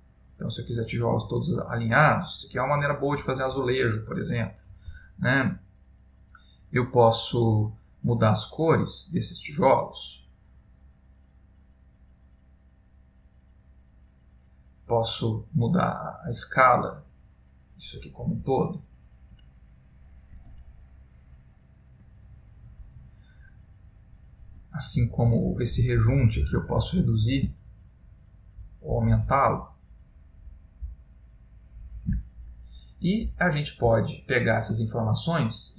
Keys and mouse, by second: 2.1 middle click, 6.0 middle click, 8.5 middle click, 8.5 click, 11.2 click, 16.3 click, 19.5 middle click, 20.7 ctrl+middle click, 24.3 click, 33.0 middle click, 34.1 ctrl+middle click.